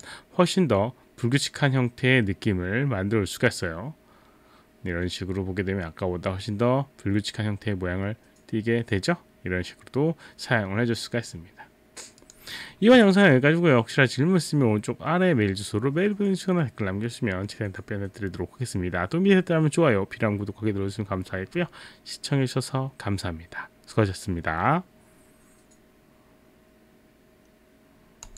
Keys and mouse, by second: 0.0 click, 12.2 click, 28.3 click.